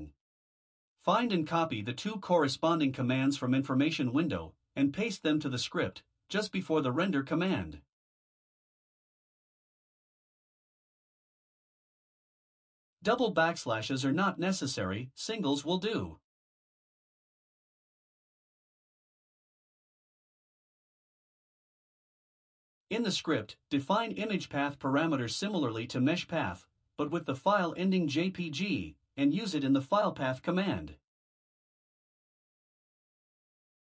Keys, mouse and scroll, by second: 0.8 click, 1.5 Return, 2.3 ctrl+v, 5.7 click, 6.8 ctrl+c, 9.0 ctrl+v, 10.2 BackSpace, 14.2 click, 15.9 BackSpace, 19.5 click, 20.6 BackSpace, 25.2 click, 31.4 ctrl+x, 31.4-33.2 typing.